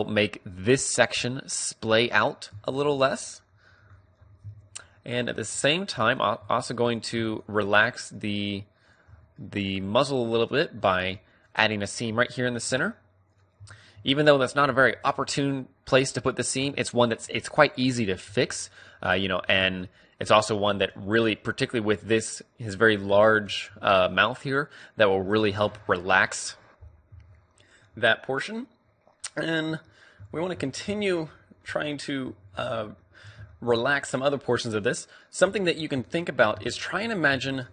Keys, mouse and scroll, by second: 2.1 middle click, 2.6 Tab, 4.0 KP_3, 4.5 Tab, 6.6 a, 7.0 click, 7.1-13.1 middle drag, 12.6 ctrl+e, 14.0 a, 14.8 u, 16.4-17.6 middle drag, 16.7 Tab, 18.4 Tab, 19.6 Tab, 19.9-22.5 middle drag, 21.1 Tab, 23.2 middle click, 23.8 a, 25.4 Tab, 25.7 middle click, 28.4-30.4 middle drag, 30.7 Tab, 31.6 a, 32.2 a, 33.4 middle click, 33.8 middle click, 35.2 middle click, 35.6 KP_3.